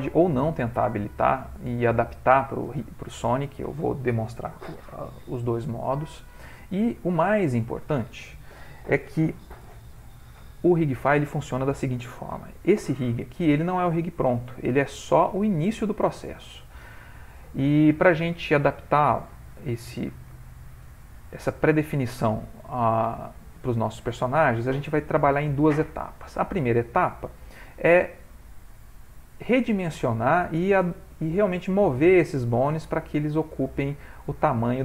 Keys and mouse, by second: 4.8 middle click, 5.5 ctrl+middle click, 6.1 shift+middle click, 6.7 ctrl+middle click, 7.0 ctrl+middle click, 7.2 shift+middle click, 13.0 middle click, 15.6 middle click, 16.5 shift+middle click, 16.6 shift+middle click, 18.8 click, 19.7 ctrl+middle click, 20.4 shift+middle click.